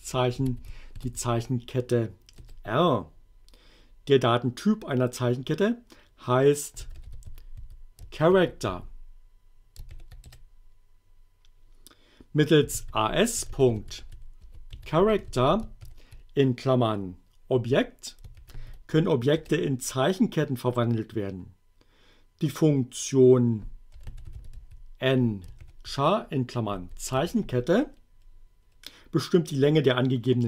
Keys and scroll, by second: 0.4 shift+r, 1.0 shift+2, 2.4 Return, 6.5-8.7 typing, 9.9 shift+9, 10.3 shift+Return, 12.4-15.8 typing, 17.5 1, 18.3 shift+9, 19.4 Return, 23.7-25.6 typing, 26.7 a, 27.3 shift+9.